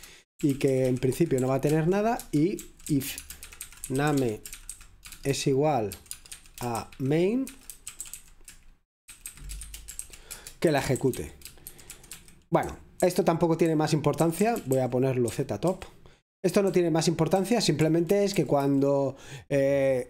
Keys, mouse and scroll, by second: 0.0-6.4 typing, 7.5-8.4 typing, 9.7-18.8 typing.